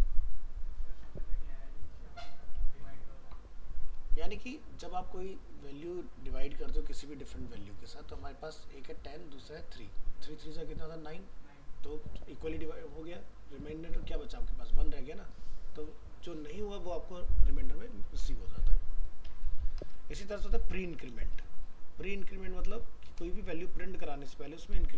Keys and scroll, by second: 20.2 ctrl+c, 21.1 ctrl+v, 23.4 ctrl+shift+Left, 24.8 ctrl+shift+Right.